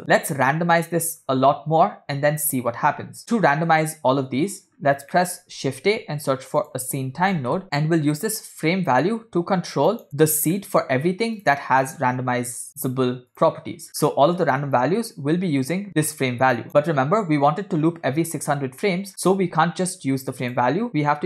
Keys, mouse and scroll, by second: 3.2 middle click, 3.2 scroll down 2, 4.8-5.2 scroll up 3, 5.3 middle click, 5.8 shift+a, 8.6-10.1 drag, 10.6 middle click, 11.4 click, 11.9 middle click, 13.4 click, 13.9 scroll down 2, 14.0-14.4 scroll up 3, 14.4 scroll down 2, 16.0-16.6 drag, 18.9 middle click, 19.1 scroll up 3, 19.3 shift+a.